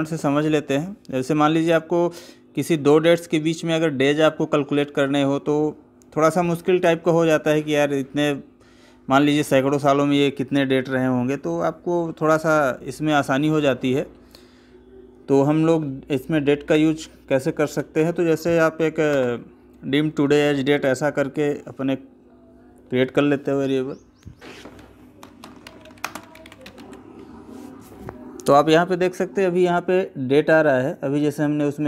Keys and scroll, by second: 18.9 space, 25.1 space, 25.8 space.